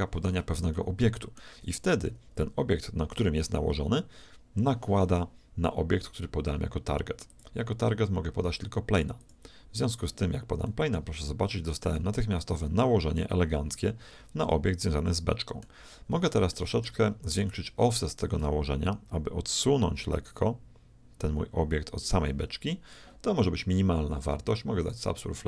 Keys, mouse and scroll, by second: 0.8-2.7 shift+middle drag, 7.3-9.3 drag, 10.6-12.4 middle drag, 12.0 z, 15.9-17.7 middle drag, 18.2-20.1 drag, 24.8-25.4 drag.